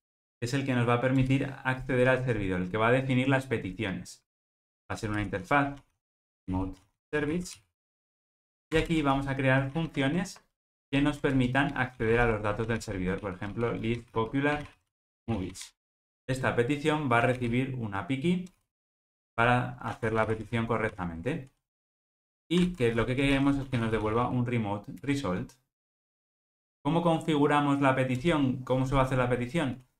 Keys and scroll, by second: 9.7 super+z, 25.1 Return.